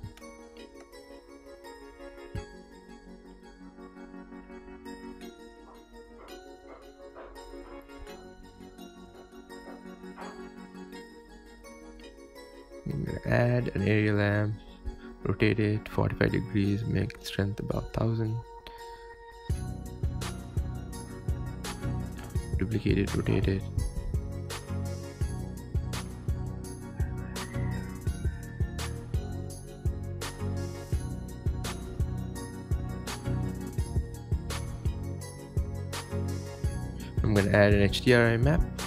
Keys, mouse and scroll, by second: 0.2 space, 0.3 click, 1.1-2.5 drag, 4.1 space, 5.7 scroll up 3, 6.4 space, 6.6 scroll down 2, 6.8 scroll up 6, 7.0 scroll down 7, 7.3 click, 8.0 scroll up 1, 9.6 click, 9.8-10.6 scroll down 5, 10.3 middle click, 10.6 shift+a, 11.9 g, 12.3 KP_0, 12.7 s, 13.7 s, 14.0 r, 15.0 r, 15.9 g, 17.3 KP_0, 18.5-18.9 scroll up 2, 18.9 r, 19.5 g, 20.0 g, 21.1 r, 22.1 scroll down 2, 22.3 shift+d, 22.7 g, 23.0 g, 23.8 r, 24.6 scroll up 2, 24.8 shift+middle click, 25.1 click, 26.5 shift+d, 27.1 shift+a, 28.5 click, 28.7 click, 29.6 scroll up 5, 30.0 click, 31.1-32.3 drag, 32.3 middle drag, 33.0 scroll up 5, 33.1-33.6 scroll down 5, 35.0 click, 35.6 middle click, 37.2 click, 37.6 click, 38.1-38.8 drag.